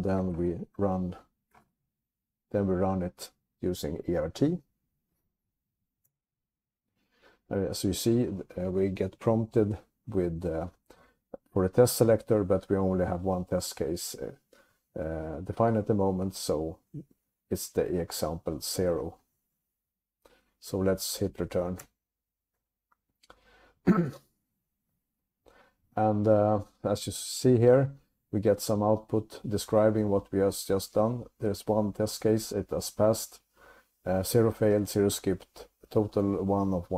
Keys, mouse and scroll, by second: 0.5 alt+x, 1.5-2.4 typing, 6.2 Return, 21.9 Return.